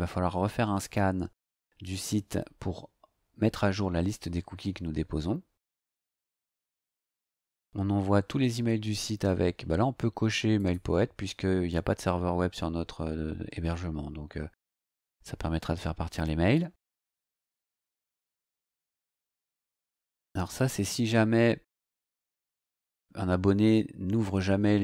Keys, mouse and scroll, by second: 5.6 scroll down 2, 10.5 click, 18.1-19.0 scroll down 4, 20.1 scroll down 2.